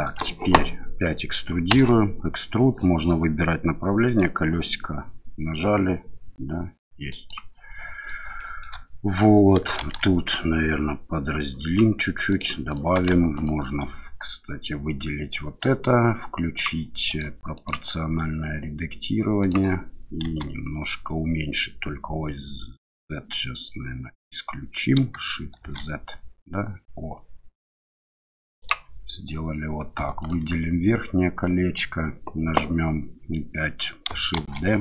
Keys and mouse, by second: 1.7 e, 4.0 middle click, 7.1 click, 8.4 shift+middle click, 9.8 ctrl+r, 12.7 click, 13.3 alt+click, 17.1 click, 17.6-19.6 drag, 20.2 s, 25.6 shift+z, 28.6 click, 30.2 alt+click, 34.4 shift+d.